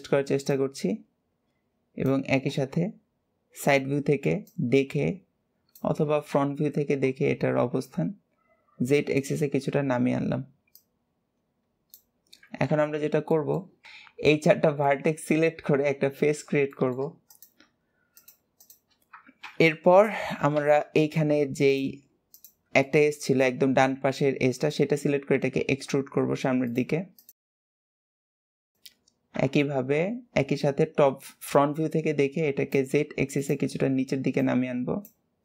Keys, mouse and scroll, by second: 0.2 click, 3.0-3.8 scroll up 2, 4.2 click, 6.3 ctrl+KP_1, 7.5 KP_1, 8.5-9.0 scroll down 2, 9.0 shift+middle click, 9.7-10.5 scroll up 2, 10.5 click, 11.9-12.5 scroll down 2, 12.8-13.2 scroll down 1, 13.2 middle click, 14.6 middle click, 15.5 scroll down 2, 16.5 shift+middle click, 17.0 click, 18.0 shift+click, 18.4 shift+click, 19.9 scroll down 2, 20.8 shift+middle click, 21.4 click, 22.1 shift+click, 22.6-24.8 shift+middle drag, 27.0 click, 27.8 g, 28.6 shift+click, 29.7 scroll up 2, 31.1 drag, 33.2 click, 34.1 click, 35.3 click.